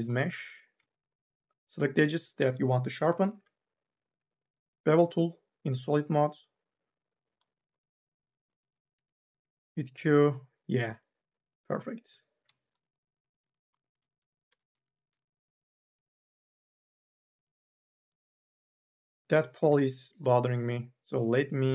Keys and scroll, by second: 3.0 m, 3.4 s, 8.8 q, 13.5-14.5 typing, 20.0 ctrl+z.